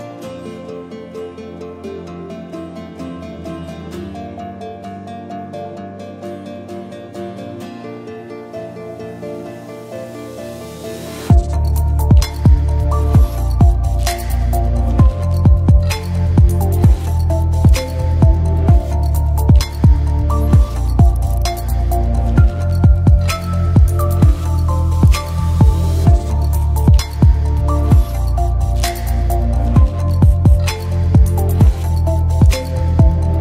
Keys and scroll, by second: 8.7-9.6 typing, 15.5 space, 17.5-18.3 typing, 20.2-21.2 typing.